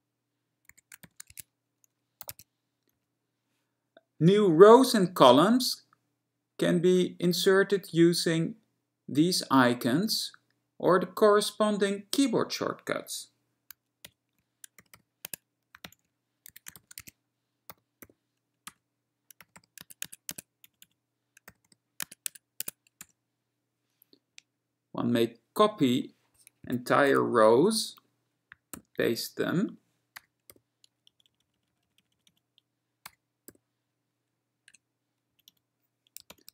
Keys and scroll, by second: 0.6-3.0 typing, 3.0 Right, 14.1 alt+Right, 15.0 ., 15.1 ., 15.3 Tab, 15.9 alt+Right, 16.4-18.2 typing, 18.8 Return, 19.6 ., 19.7 ., 19.9 Tab, 20.2 Tab, 20.4 Tab, 20.7 Right, 20.9 Right, 21.7 ., 21.8 ., 22.1 Tab, 22.4 Tab, 22.7 Tab, 23.1 Return, 26.7 Escape, 27.3 w, 28.8 ctrl+y, 30.3 BackSpace, 30.7 n, 31.1 Right, 31.4 Right, 31.5 Right, 31.6 Right, 31.8 Right, 31.9 Right, 32.1 Right, 32.2 Right, 32.3 Right, 33.2 BackSpace, 33.7 n, 34.8 Return, 35.4 Right, 35.5 Right, 36.4 alt+Right.